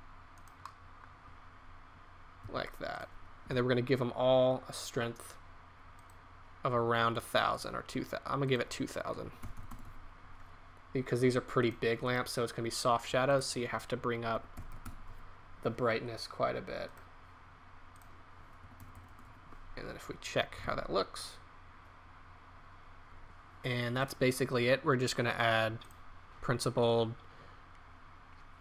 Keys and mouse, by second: 0.6 click, 2.3 s, 3.5 KP_0, 9.5 KP_0, 9.6 KP_0, 14.7 KP_0, 14.8 KP_0, 18.8 KP_0, 19.0 KP_0, 22.0 shift+z, 24.0 right click.